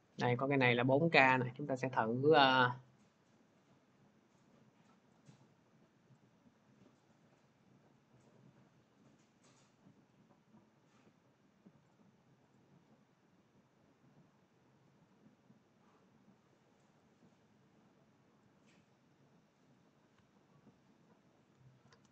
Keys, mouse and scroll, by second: 1.2 click, 2.3 middle click, 5.0 click, 6.9 click, 9.4 click, 11.7 click, 12.4 click, 16.9 click, 19.6 click.